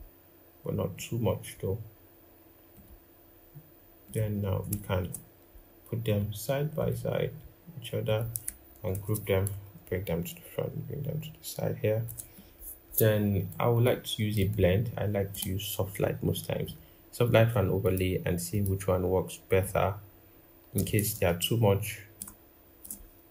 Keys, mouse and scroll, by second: 4.7 shift+click, 8.7 ctrl+g, 9.5 alt+click, 21.9 shift+click.